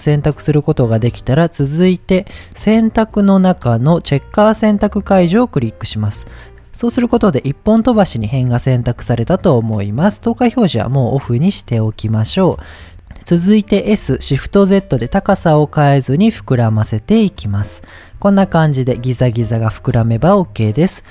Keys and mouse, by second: 3.2-5.6 drag, 10.7 click, 11.7 middle click, 13.8 s, 14.7 shift+z, 17.4 click, 18.2-19.7 middle drag.